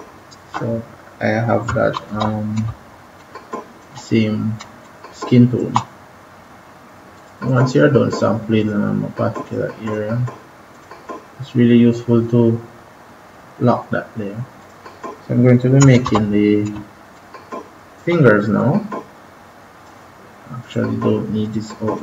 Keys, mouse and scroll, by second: 1.9 ctrl+=, 2.1 ctrl+=, 2.6 space, 3.1 click, 3.3 space, 4.7 click, 5.1 space, 7.0 click, 14.6 click, 15.9 ctrl+=, 16.7 space, 17.1 click, 17.2 space, 18.5 click.